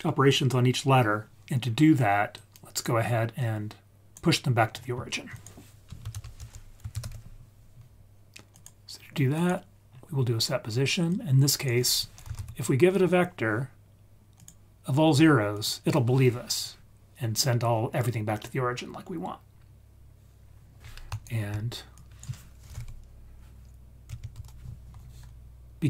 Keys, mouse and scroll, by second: 1.5 scroll down 3, 2.3-2.9 drag, 3.3-4.1 drag, 4.6-5.0 scroll up 4, 5.3 click, 6.1 shift+a, 9.9-10.4 scroll up 2, 11.0-13.1 drag, 15.5 click, 16.2-17.7 scroll up 3, 17.7-18.5 scroll down 2, 18.5-19.4 scroll down 1, 19.4-20.4 scroll down 3, 20.4-21.1 scroll up 2, 21.1-21.4 ctrl+right drag, 21.9-25.8 drag.